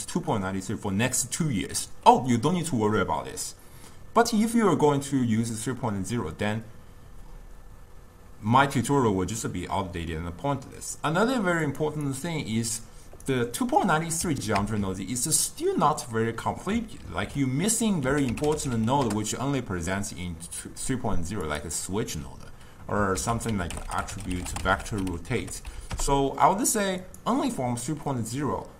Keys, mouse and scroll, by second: 14.6 ctrl+x.